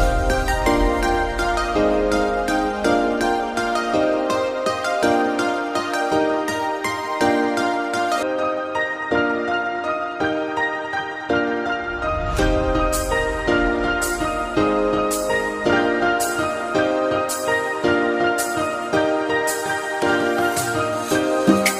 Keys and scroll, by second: 1.4 ctrl+z.